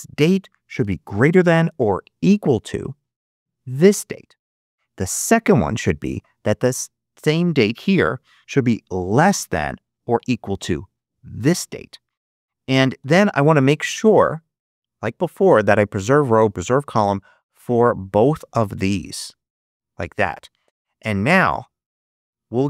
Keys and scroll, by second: 1.0 shift+., 2.9 =, 5.1 ', 9.1 shift+,, 10.0 shift+=, 12.9 shift+0.